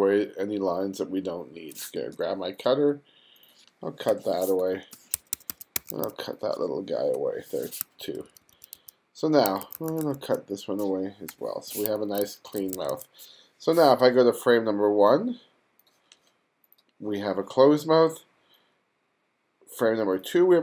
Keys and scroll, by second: 2.2 space, 4.1-7.8 typing, 9.5 2, 11.3 BackSpace, 12.0 1.